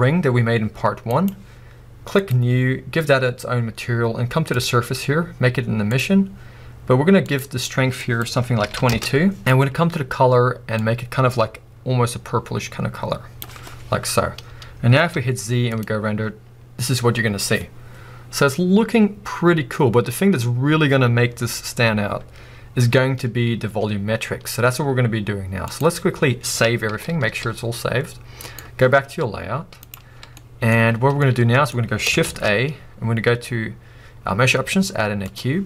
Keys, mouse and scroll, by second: 0.9 middle click, 2.3-10.8 drag, 8.9 2, 9.1 Return, 13.9 scroll down 3, 15.9 z, 16.6 a, 24.2-25.0 scroll down 1, 25.0 z, 28.7-30.1 drag, 30.1 scroll down 1, 30.4-35.6 middle drag, 30.9-31.2 scroll down 2, 31.9-32.3 scroll down 1.